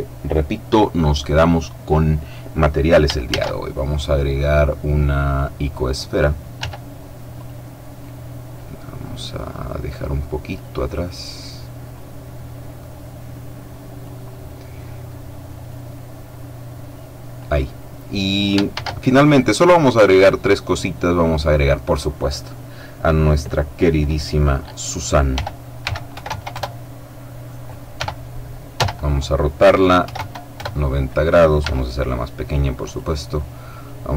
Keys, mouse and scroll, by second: 3.2 shift+a, 5.2 click, 6.5 s, 7.2 click, 7.9-9.0 drag, 9.9-10.9 drag, 10.6 right click, 11.8 click, 15.6 click, 18.6 shift+a, 21.1 click, 25.2 r, 25.7 x, 26.0 KP_9, 26.1 KP_0, 26.4 KP_Enter, 27.8 r, 28.6 z, 29.9 KP_9, 30.0 KP_0, 30.4 KP_Enter, 31.5 s, 32.7 click.